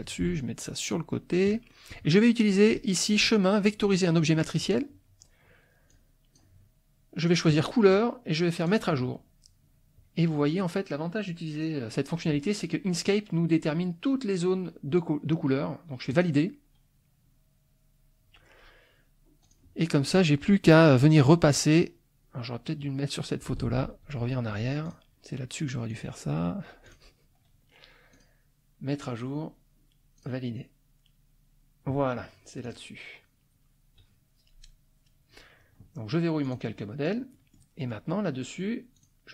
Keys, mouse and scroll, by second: 0.1-1.5 ctrl+drag, 1.7 ctrl+middle click, 2.0 ctrl+click, 2.7 click, 4.3 click, 5.9 click, 7.5 click, 8.7 click, 16.1 click, 19.4 click, 20.0 middle click, 23.6 ctrl+z, 24.9 ctrl+click, 25.9 click, 26.9 click, 28.1 click, 30.2 click, 32.6 click, 36.5 click, 37.3 middle click, 37.8 middle click, 38.9 click.